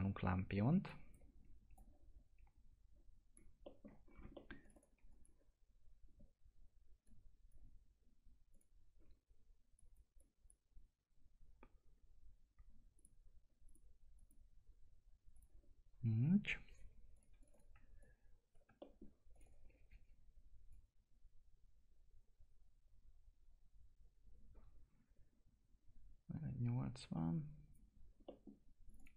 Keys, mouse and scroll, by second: 3.6 middle click, 4.3 middle click, 4.6 click, 12.9 click, 18.0 click, 18.8 middle click, 19.3 click, 28.2 middle click, 28.9 click.